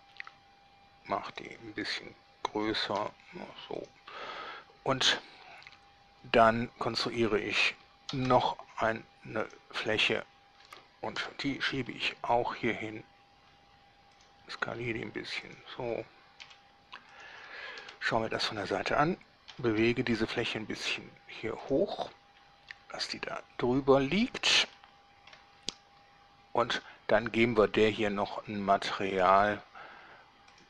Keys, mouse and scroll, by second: 0.3 s, 1.5 drag, 2.8 s, 3.2 x, 4.0 click, 4.5-4.9 middle drag, 4.9-5.4 drag, 8.3 shift+a, 9.6 click, 11.4 7, 12.0 g, 14.4 click, 14.8 s, 15.7 drag, 16.6 g, 17.4 click, 18.0 1, 19.7 g, 20.0 z, 21.8 drag, 22.1-23.0 middle drag, 23.2-24.6 shift+middle drag, 25.0-25.7 shift+middle drag, 29.4 click.